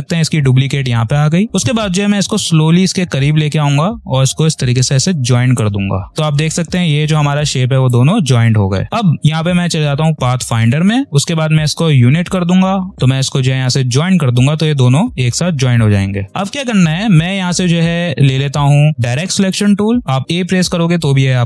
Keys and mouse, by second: 7.8-9.7 drag, 12.2 click, 14.4-16.3 drag, 19.4 click.